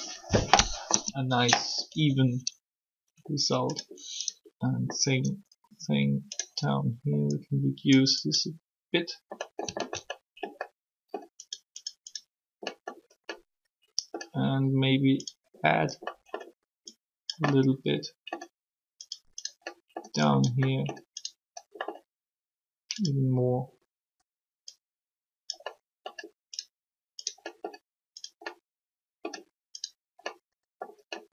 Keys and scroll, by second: 0.9 3.